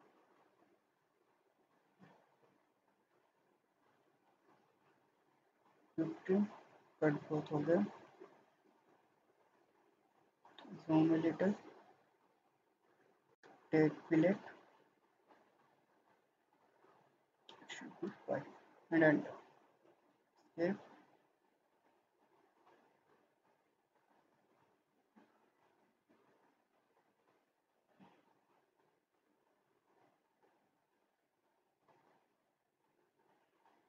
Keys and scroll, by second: 17.6 5, 18.1 Return, 19.7 Escape, 23.8 ctrl+z.